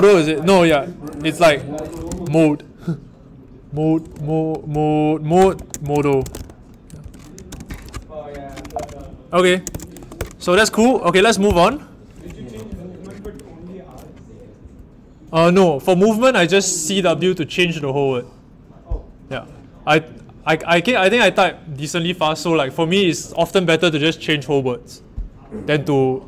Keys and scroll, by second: 0.5 typing, 1.6-6.8 typing, 7.0 super+BackSpace, 7.6 super+r, 8.7-10.4 typing, 11.4 ctrl+alt+Right, 12.3 ctrl+alt+Left, 14.6 Up.